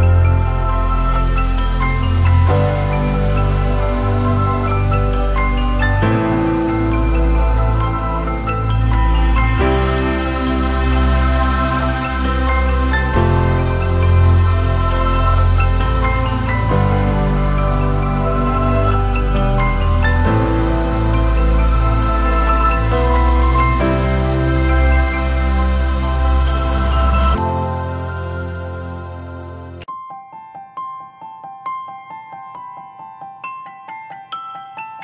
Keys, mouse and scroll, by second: 21.1 alt+click, 25.2 double click, 29.3 alt+click.